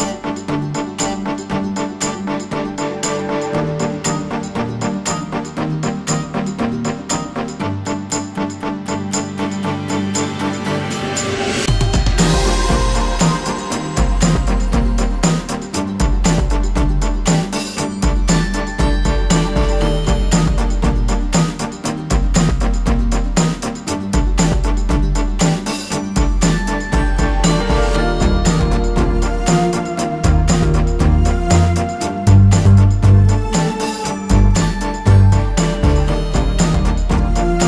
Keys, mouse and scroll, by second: 0.3 space, 0.5-4.2 drag, 4.2 space, 4.3 click, 5.1 space, 5.3-8.0 drag, 8.0 alt+space, 8.1 alt+scroll up 1, 9.1 alt+scroll down 1, 9.5 alt+scroll up 1, 10.6 space, 12.9-17.4 drag, 19.3 space, 19.5 ctrl+scroll up 1, 22.5-24.0 drag, 26.2 click, 27.2 alt+scroll down 1, 27.9 alt+scroll up 1, 30.0 space, 30.5 ctrl+z, 32.4 click, 33.2 ctrl+z, 34.5 click, 36.9 alt+scroll up 1.